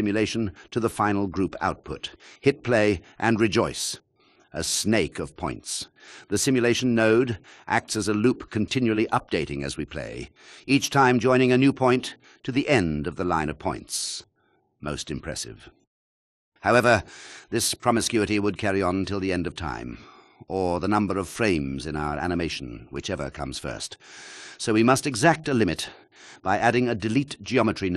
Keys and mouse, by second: 13.0 click, 15.6 click, 21.6 shift+a, 26.9 click.